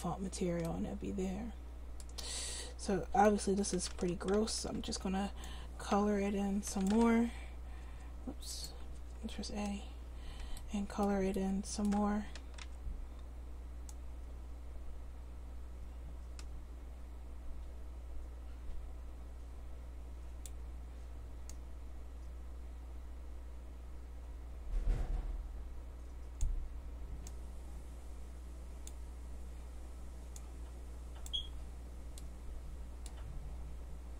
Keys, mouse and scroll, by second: 2.3 Tab, 4.4 c, 8.6-9.7 right drag, 9.0 a, 10.7 a, 12.7 c.